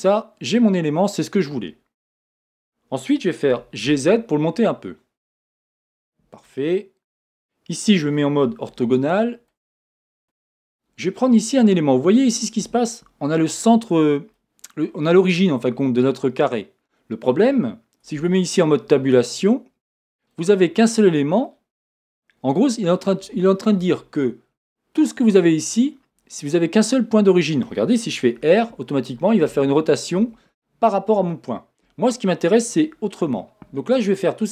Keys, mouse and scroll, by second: 3.6 g, 5.7 click, 6.0-10.7 middle drag, 7.1 KP_1, 10.0-10.7 scroll up 2, 10.7 click, 11.3-34.4 middle drag, 18.2 Tab, 28.4 r, 30.3 Escape.